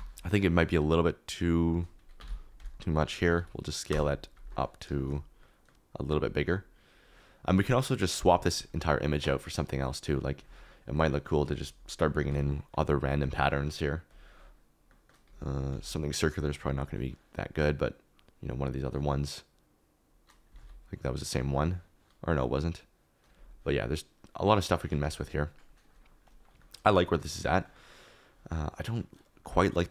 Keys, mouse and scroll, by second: 5.7 middle click, 7.0 middle click, 12.2 ctrl+z, 14.8 middle click, 15.7 ctrl+z, 20.5 ctrl+z, 26.2 KP_Decimal.